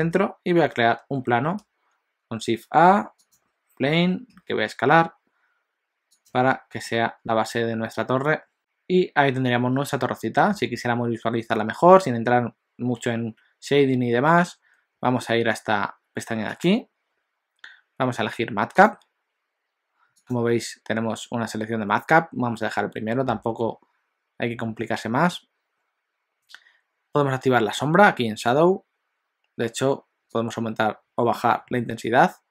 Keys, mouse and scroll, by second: 0.9 shift+a, 6.4 alt+a, 6.9 middle click, 8.6 scroll down 1, 8.6 scroll up 1, 16.4 click.